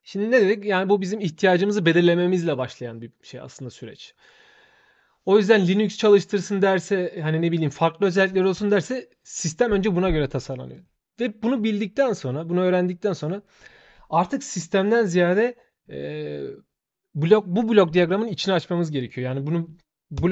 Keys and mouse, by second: 10.5 shift+click, 18.8 shift+click.